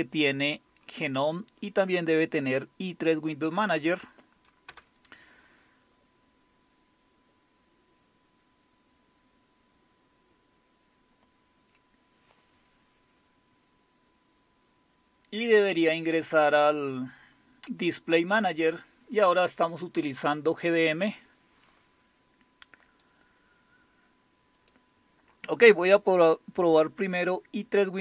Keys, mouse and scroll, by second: 22.9 click, 24.6 click, 26.6 click.